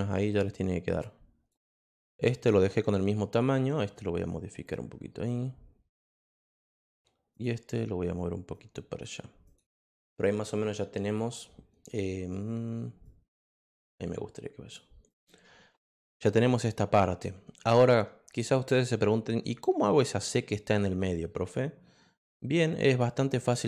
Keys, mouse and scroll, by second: 2.3 click, 3.8-6.7 drag, 7.3 click, 8.5 click, 9.4 click, 11.0 click, 13.0-14.7 drag, 15.1 click.